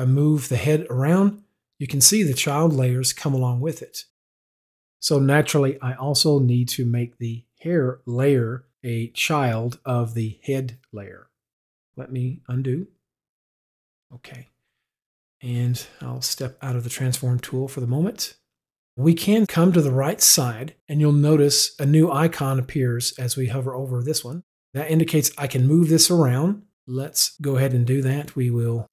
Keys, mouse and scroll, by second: 13.1 z, 13.9 middle click, 16.4 middle click, 17.1 click, 18.8 click.